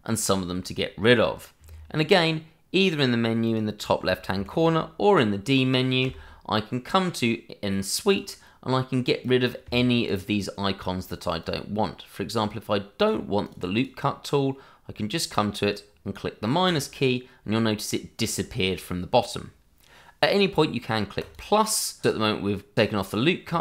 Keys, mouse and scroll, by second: 3.4 click, 4.3 Escape, 6.0 d, 8.1 click, 13.5 double click, 16.6 click, 21.2 click, 23.4 click.